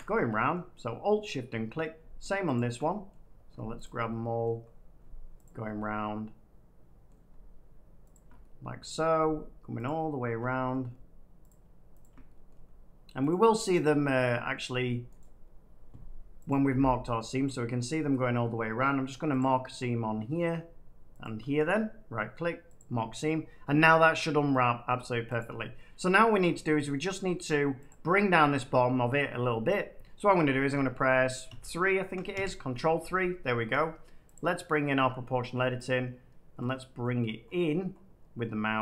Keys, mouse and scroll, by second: 0.5 middle click, 1.7 middle click, 1.8-2.5 scroll, 2.5 click, 3.0 middle click, 3.7 click, 4.5-5.2 scroll up 3, 5.4 click, 5.4 scroll, 7.0 scroll, 8.0 click, 8.9 middle click, 9.8 click, 10.7 middle click, 11.4 shift+click, 11.9 shift+click, 12.4 middle click, 13.2 shift+click, 13.8 shift+click, 14.5 middle click, 15.1 right click, 16.4 click, 18.4 middle click, 19.3 click, 19.6 scroll, 20.2 scroll down 1, 20.4 middle click, 21.1 shift+click, 21.6 right click, 22.7 click, 23.7 scroll down 1, 23.8-24.5 scroll down 3, 24.8 middle click, 25.3 click, 26.1 click, 26.9 middle click, 27.8 click, 30.7-31.4 typing, 32.3 ctrl+3, 34.3 click, 36.5-37.1 scroll up 9, 37.1-37.4 scroll down 5, 37.4 middle click, 37.5 middle click, 37.9 middle click, 37.9 middle click, 38.0 middle click, 38.3 middle click, 38.4 middle click.